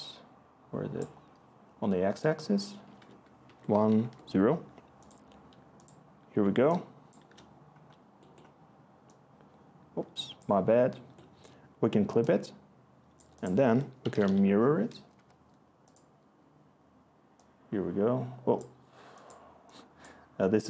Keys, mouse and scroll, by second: 2.8 1, 3.4 Tab, 3.7 0, 3.9 Tab, 6.4-7.2 click, 6.9 click, 13.6 Tab, 13.9-14.7 typing, 15.1 Return.